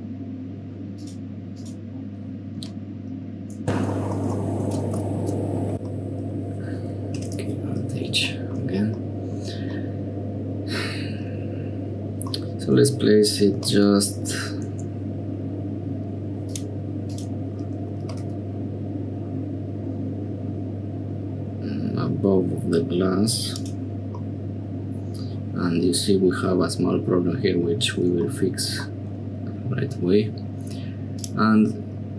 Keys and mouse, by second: 0.9 click, 1.5 click, 2.6 g, 3.8 click, 4.1 click, 4.3 shift+click, 4.6 click, 4.8 g, 5.9 click, 7.1 alt+h, 9.0 middle click, 9.7-10.7 middle drag, 12.3-13.5 middle drag, 14.3 g, 16.5 click, 17.1 right click, 18.0 g, 24.2 middle click, 28.3 shift+middle click, 28.9-30.0 middle drag, 31.2-32.1 middle drag.